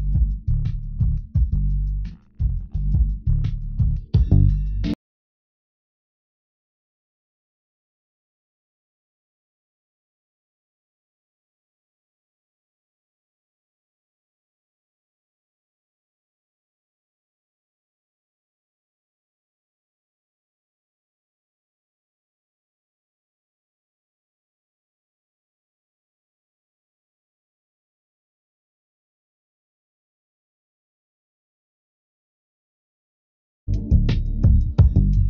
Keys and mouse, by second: 0.1 g, 4.5 g, 6.7 click, 7.8 click, 8.5 g, 12.4-15.3 drag, 14.8 g, 21.3 g, 29.8 g.